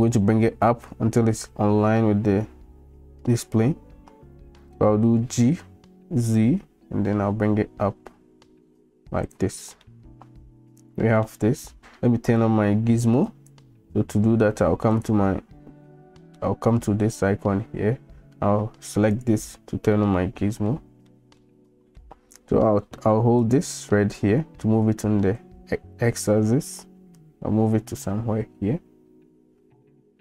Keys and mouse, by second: 5.3 g, 9.9-11.3 middle drag, 13.3-14.6 drag, 15.1-19.6 drag, 20.0-20.7 middle drag, 21.1-21.4 middle drag, 21.7 shift+middle drag, 23.4-25.5 drag, 26.4-27.0 drag, 29.4-30.2 drag.